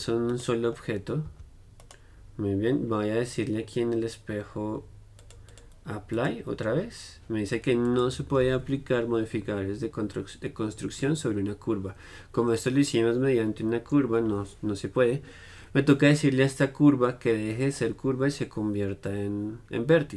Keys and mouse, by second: 0.5-4.6 drag, 1.4 g, 5.4-20.1 drag.